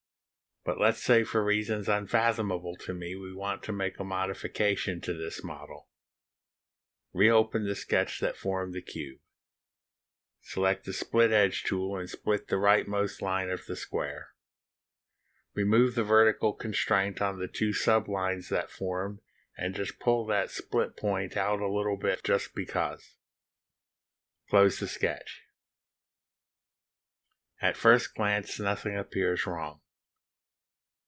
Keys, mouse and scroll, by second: 8.0 click, 9.0 click, 12.2 click, 14.5 click, 15.4 click, 16.6 click, 18.8 click, 20.2 Delete, 22.1-24.3 drag, 26.9 click, 30.2-31.0 drag, 30.4-31.0 right drag.